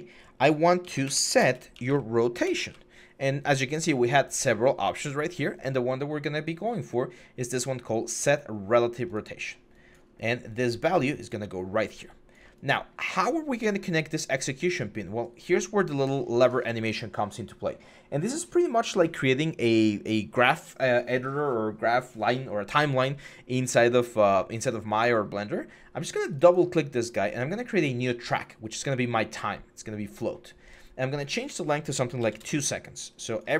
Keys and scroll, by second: 0.6-2.7 typing, 32.0 2, 32.2 Return.